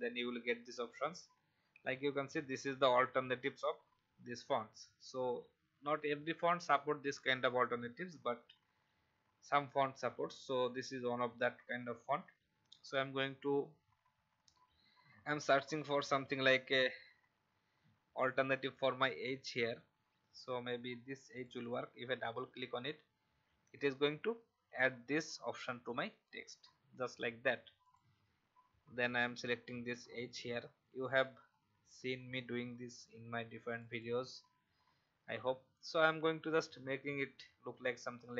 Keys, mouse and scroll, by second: 12.6-15.0 scroll down 1, 21.3 click, 30.0 scroll down 1, 31.8-32.3 scroll down 1, 33.6 click, 36.7 v, 38.2 click.